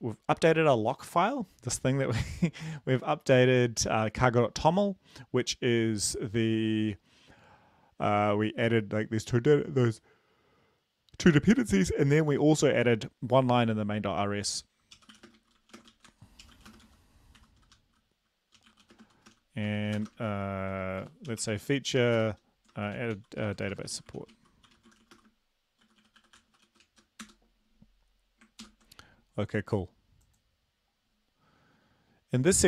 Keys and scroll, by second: 15.0-27.3 typing, 28.6 ctrl+l.